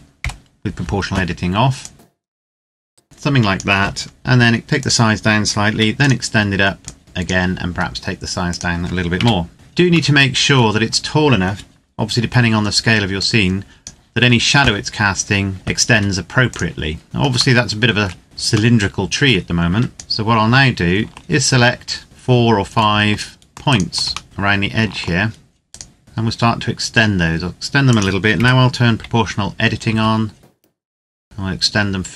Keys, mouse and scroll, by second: 0.1 o, 1.7 click, 3.8-4.6 scroll down 1, 4.6 click, 5.4 e, 5.7 click, 7.5 s, 8.2 click, 8.9 KP_0, 9.5-10.0 scroll down 1, 10.0 middle click, 10.4 scroll down 1, 13.0 click, 15.5 scroll down 1, 15.7 s, 16.2 click, 17.0 Tab, 17.6 shift+middle click, 18.2-18.6 scroll up 1, 18.6 middle click, 19.2 scroll down 1, 19.5 Tab, 19.9 right click, 22.0 middle click, 23.6 shift+right click, 24.2 middle click, 25.7 shift+right click, 26.0 s, 27.6 click, 28.1 o, 29.6 s, 30.5-31.3 scroll up 1.